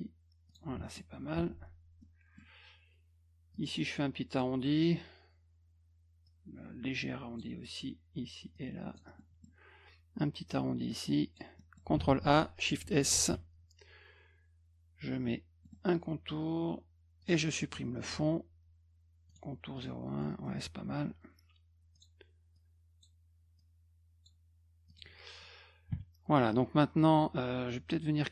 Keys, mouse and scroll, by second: 0.5 click, 0.8 middle click, 1.4 F2, 2.0 middle click, 3.5 click, 6.2-7.4 drag, 8.5 click, 9.2 middle click, 10.9 click, 11.6 middle click, 11.9 ctrl+a, 13.1 shift+s, 15.6 middle click, 17.2 click, 17.7 middle click, 19.3 right click, 19.8 click, 20.2 middle click, 21.9 click, 22.5 click, 23.6 click, 24.9 click.